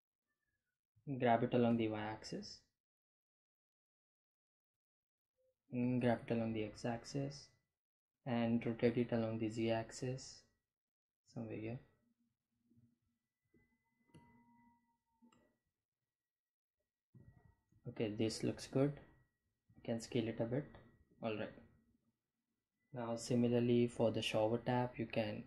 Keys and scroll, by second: 4.1 g, 4.5 x, 6.9 r, 7.4 z, 12.1 Delete, 15.9 g, 16.1 x, 18.6 s.